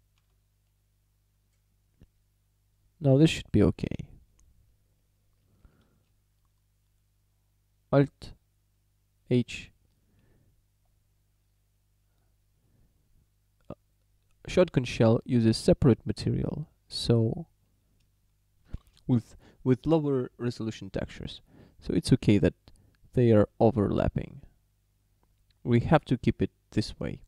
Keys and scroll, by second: 0.2 a, 9.4 alt+h, 18.9 shift+d.